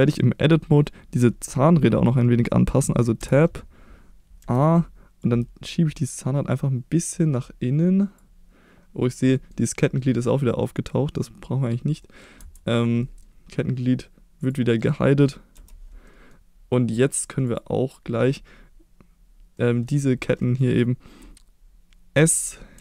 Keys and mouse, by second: 0.1 middle click, 3.2 Tab, 4.4 a, 5.3 click, 9.3 middle click, 10.6-11.7 middle drag, 12.0 middle click, 12.4 Tab, 13.0 middle click, 14.4 click, 15.5 h, 16.0 middle drag, 17.4 click, 19.5-19.8 middle drag, 20.3 middle click, 22.1 s, 22.7 x.